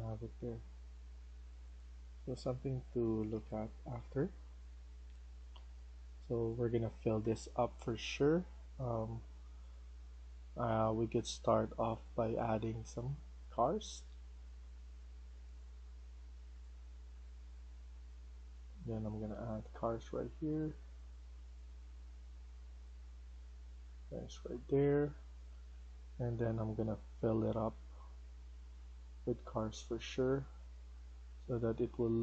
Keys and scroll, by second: 2.4-5.9 typing, 12.6-13.3 a, 13.4 w, 14.0 q, 14.3 a, 17.7-19.9 typing, 22.0 s, 24.2-26.1 typing, 29.4-32.2 typing.